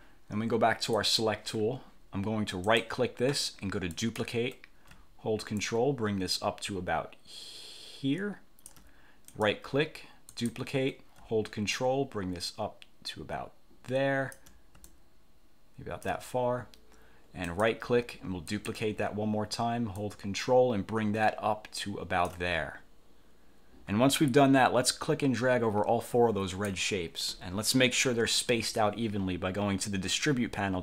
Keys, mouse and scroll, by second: 1.0 click, 2.8 click, 4.0 click, 5.7-9.0 ctrl+drag, 9.4 click, 10.4 click, 11.8-14.6 ctrl+drag, 15.0-16.3 ctrl+drag, 17.6 click, 18.6 click, 20.1-22.6 ctrl+drag, 25.0-27.0 drag.